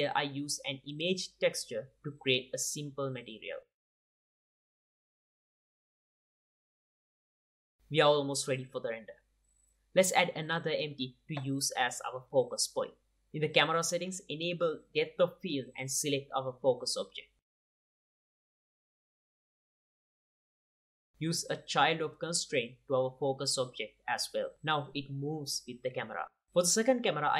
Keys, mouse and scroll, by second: 1.0 click, 1.3 shift+a, 1.8 click, 1.9 ctrl+t, 2.1 click, 2.3 g, 2.6 click, 2.8 click, 3.1 click, 3.6 click, 3.8 click, 4.1 q, 4.2-5.6 drag, 5.1 shift+d, 6.6 click, 7.3 click, 7.5 middle click, 7.8 alt+a, 8.3 ctrl+s, 8.6-9.7 drag, 13.7-17.2 drag, 17.6 click, 17.8 g, 18.1 click, 18.1 r, 18.4 click, 18.8 click, 19.2 g, 19.2 r, 19.9 g, 20.3 r, 21.0 click, 21.3 middle drag, 21.6-23.0 drag, 23.7-24.3 drag, 25.5 click, 26.2 click, 26.8 shift+a.